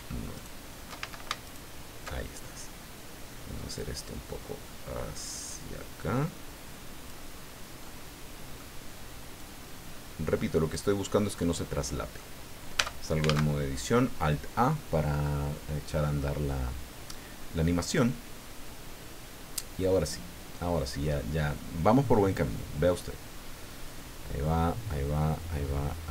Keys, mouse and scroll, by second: 0.3 alt+shift+right click, 1.0 alt+shift+a, 1.4 alt+shift+right click, 3.8-7.2 drag, 7.8 click, 9.3-10.9 drag, 11.0 scroll down 2, 11.3 click, 12.8 Tab, 13.2 alt+a.